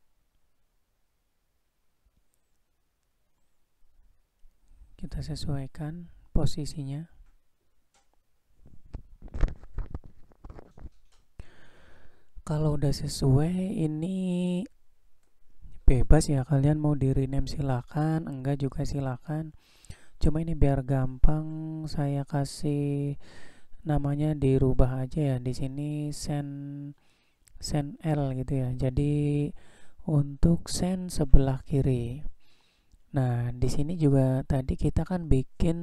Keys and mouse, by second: 0.1-0.8 middle drag, 1.0-1.6 shift+middle drag, 1.8-2.6 middle drag, 2.9-3.3 shift+middle drag, 4.2-9.8 drag, 10.1 middle click, 13.0 drag, 15.4 click, 24.6-28.9 drag.